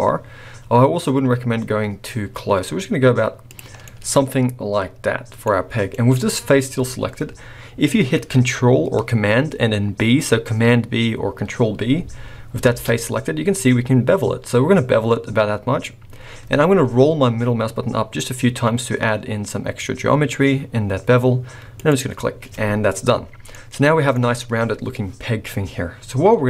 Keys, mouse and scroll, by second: 3.7 scroll down 5, 3.8 middle click, 5.5-6.8 scroll up 7, 5.9 middle click, 6.8 scroll up 1, 12.6 ctrl+b, 23.5 middle click.